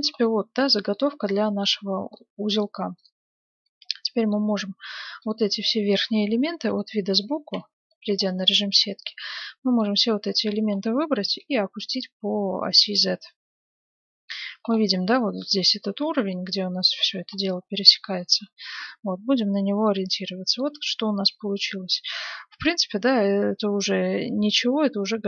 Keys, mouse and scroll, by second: 2.9-4.7 right drag, 5.2-6.9 right drag, 6.5 KP_3, 7.2-10.2 middle drag, 7.6 z, 8.7 a, 9.0 b, 10.7 middle click, 11.4-13.3 drag, 14.6-16.7 middle drag, 17.1-17.5 scroll down 1, 17.5-23.2 middle drag, 19.3 z, 20.8 Tab.